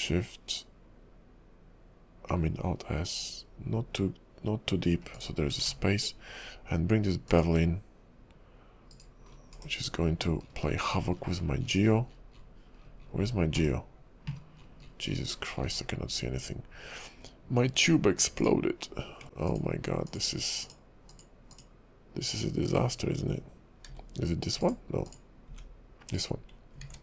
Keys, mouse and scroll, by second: 5.6 ctrl+`, 9.5 scroll down 4, 9.7 /, 10.6-12.7 scroll down 43, 12.9-13.8 scroll up 15, 13.8 /, 14.6-16.4 scroll down 30, 17.2-17.6 scroll up 7, 18.4 click, 19.5 click, 20.1 click, 20.7 click, 21.1 click, 21.6 click, 22.3 click, 24.0 g, 25.1 click, 25.5 g, 26.9 ctrl+`.